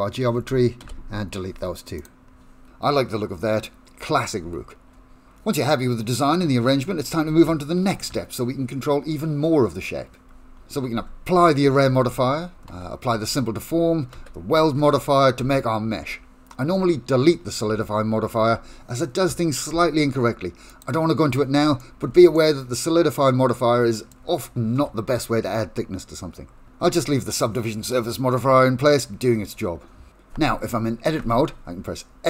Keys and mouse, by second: 0.8 Delete, 2.7 middle click, 3.3-4.3 middle drag, 4.5 shift+middle click, 5.1 middle click, 6.0 middle click, 11.0 Tab, 12.7 ctrl+a, 14.2 ctrl+a, 15.4 ctrl+a, 17.7 Tab, 18.4 Tab, 20.7 click, 21.8 shift+middle click, 22.3-24.1 middle drag, 24.8 Tab, 31.2 a.